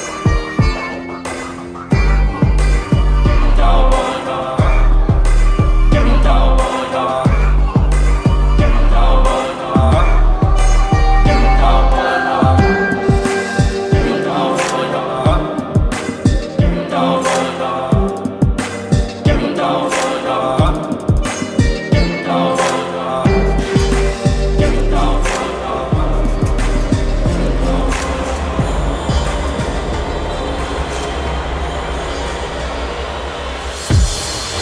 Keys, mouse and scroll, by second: 1.9 click, 4.1-6.0 shift+drag, 7.5 t, 9.3-12.4 drag, 17.7 ctrl+c, 18.7 click, 20.0 ctrl+v, 21.5 ctrl+a, 23.3-26.1 drag.